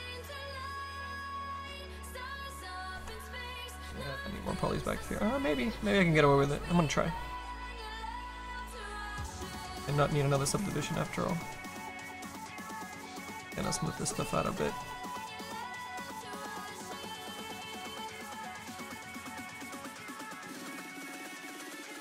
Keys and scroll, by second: 14.9 s, 16.9 s.